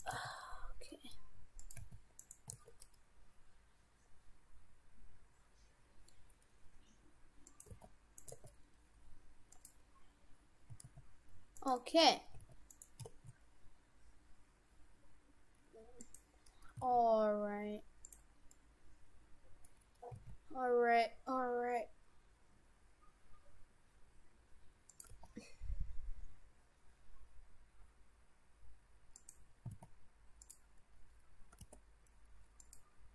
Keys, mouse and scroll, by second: 0.2 g, 1.8 s, 2.5 s, 7.7 g, 8.3 g, 10.7 s, 12.4 s, 13.1 s, 16.8 s, 18.5 middle click, 20.1 s, 25.1 g, 29.7 s, 31.5 g.